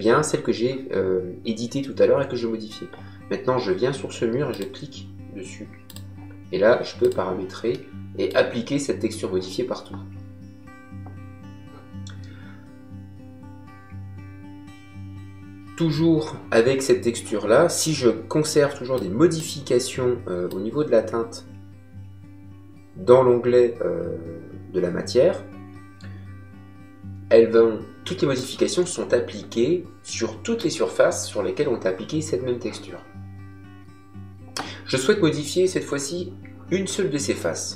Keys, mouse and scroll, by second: 4.4 click, 7.6 middle click, 18.9 click, 20.4 click, 30.0 middle click.